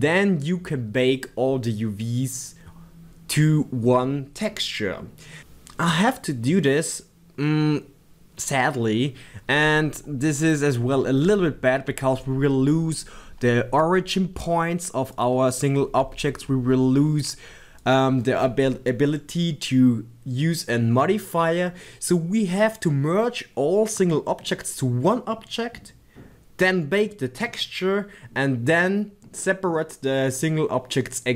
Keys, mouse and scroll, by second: 15.1 click, 15.5 scroll up 1, 16.1-17.8 shift+middle drag, 16.8 scroll down 1, 17.8 click.